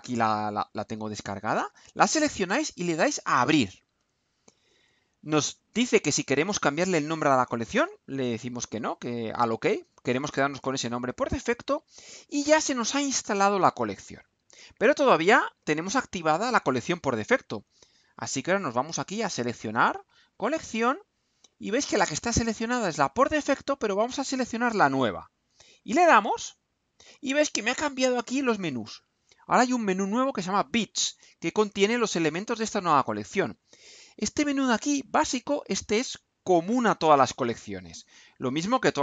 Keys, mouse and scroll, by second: 1.5 click, 3.7 click, 11.2 click, 25.9 click.